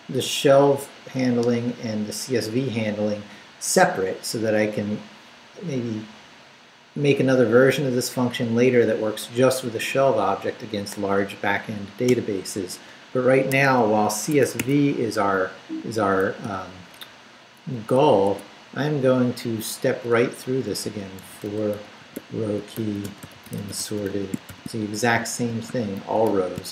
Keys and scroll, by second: 12.1 Return, 13.6 Escape, 16.4 i, 16.9 Return, 17.6 Up, 18.2 Tab, 20.6-26.7 typing.